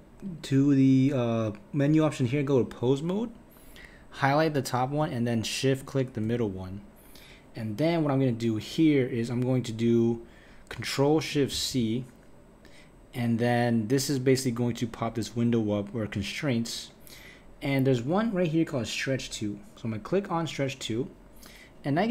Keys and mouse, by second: 0.3-4.4 drag, 5.8 shift+click, 11.5 ctrl+shift+c, 21.9 click.